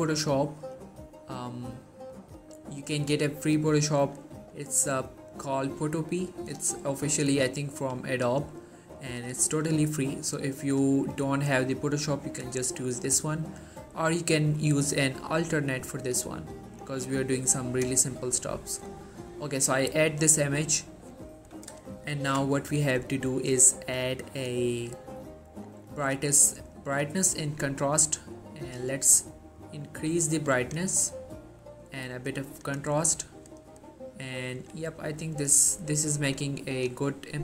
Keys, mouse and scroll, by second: 2.9 click, 6.3 typing, 9.2-11.0 drag, 22.2 ctrl+m, 23.6 click, 25.9-30.8 drag.